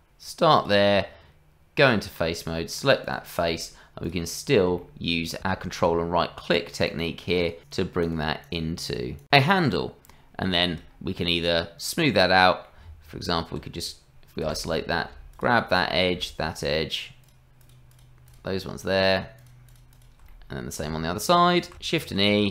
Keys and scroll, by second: 0.9 Tab, 9.6 Tab, 12.8 Tab, 14.4 KP_Divide, 22.0 shift+e.